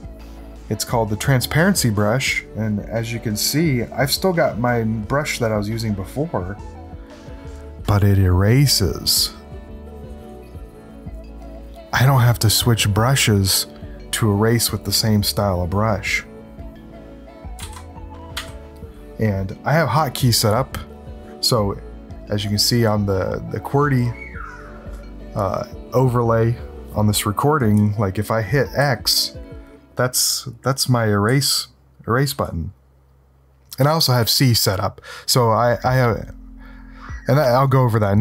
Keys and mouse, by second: 2.8-16.6 drag, 17.6 ctrl+z, 18.3 s, 28.8 x, 30.8 x, 31.2 x, 32.2 c.